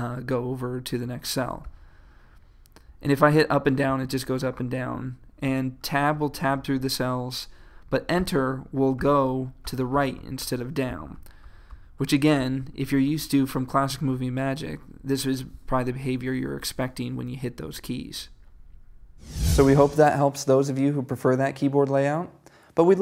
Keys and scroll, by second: 1.7 Left, 2.9 Up, 3.5 Down, 5.5 Tab, 8.2 Return.